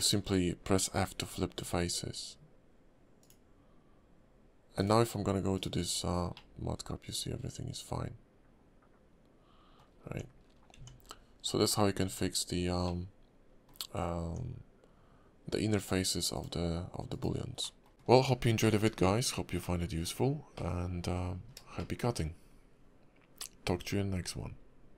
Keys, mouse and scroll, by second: 0.2-2.0 scroll up 3, 3.2 click, 5.9 scroll down 3, 6.3 middle click, 9.9-10.6 scroll up 5, 10.0 Tab, 10.7 Tab, 11.4 scroll up 2, 11.6-11.9 scroll down 8, 12.0 Tab, 12.4-12.8 scroll down 2, 12.8 middle click, 13.8-14.2 scroll up 3, 14.2 Tab, 15.8 click, 17.6 middle click, 17.9 Tab, 17.9 middle click, 17.9 scroll down 7, 18.6 shift+middle click, 18.9 scroll up 2, 19.6 middle click, 20.5 middle click, 21.3 scroll up 2, 21.8 shift+middle click.